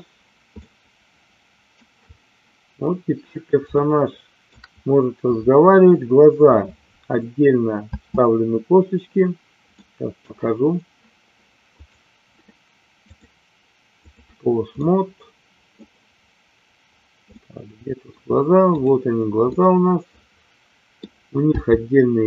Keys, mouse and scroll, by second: 0.7-1.8 middle drag, 3.8 shift+middle click, 7.9 space, 9.8 middle click, 11.8 click, 13.2 click, 14.8 middle click, 17.4 middle click, 19.4-20.9 middle drag, 21.5 g.